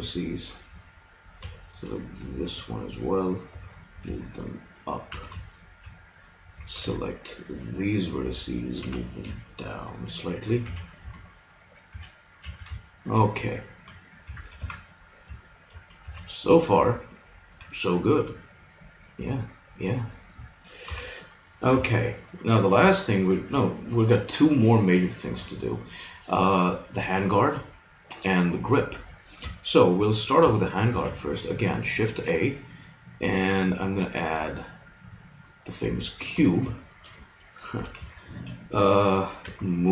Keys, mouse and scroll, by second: 1.5 b, 3.5 g, 5.1 a, 6.7 b, 8.8 g, 10.7 a, 11.1-12.9 middle drag, 11.9 a, 12.4 a, 14.3 Tab, 14.5 z, 16.0 a, 18.5-19.6 middle drag, 20.9 KP_3, 21.7 z, 22.9-24.9 middle drag, 30.9 shift+a, 36.3 Tab, 39.5 g.